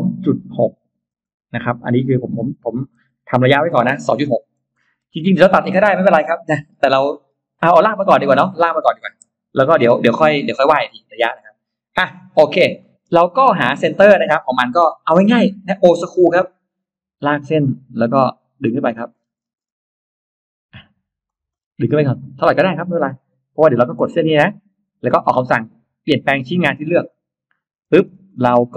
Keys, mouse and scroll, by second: 0.5 6, 1.0 Return, 2.0-3.7 typing, 4.1 Return, 4.9 space, 5.4 middle click, 6.1-6.4 scroll down 2, 6.3 middle click, 7.0-7.4 scroll up 2, 7.9-8.5 scroll up 4, 9.0 e, 9.4 click, 10.0-11.0 scroll down 2, 12.0 scroll down 1, 12.6 middle click, 13.0-14.0 scroll up 2, 14.0 middle click, 14.4 middle click, 15.2 l, 16.2 click, 17.4 click, 18.7 click, 19.0 middle click, 19.4 middle click, 21.1 click, 21.4-21.7 scroll down 1, 22.4 click, 23.0 space, 23.2 scroll up 1, 24.2 click, 26.9 click, 27.8 space, 27.9 middle click, 28.4 middle click.